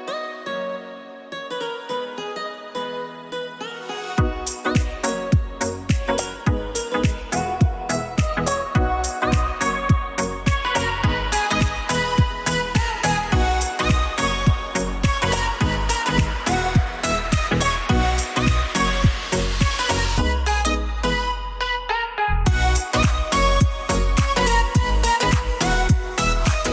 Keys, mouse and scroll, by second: 0.7 KP_1, 1.6-2.5 drag, 4.4-5.4 middle drag, 6.3 click, 6.7 click, 7.1 middle click, 8.3-8.8 drag, 9.3-10.0 middle drag, 11.0 click, 22.1 click, 22.6-23.4 drag, 23.8 click, 24.4 click, 26.0-26.7 middle drag.